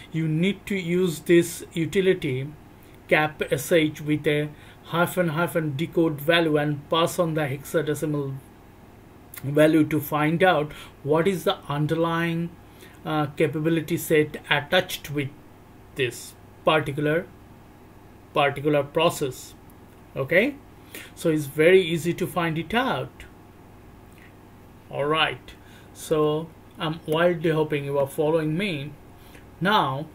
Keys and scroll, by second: 26.1 c, 27.0 Return.